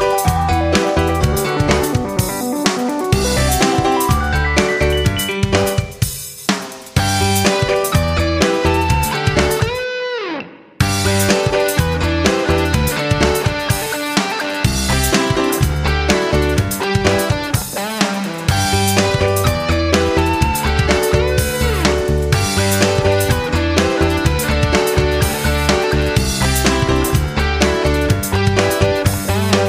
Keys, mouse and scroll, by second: 0.2 F9, 1.5-4.1 drag, 4.2 F9, 4.9-17.7 drag, 19.0 F9, 19.9 click.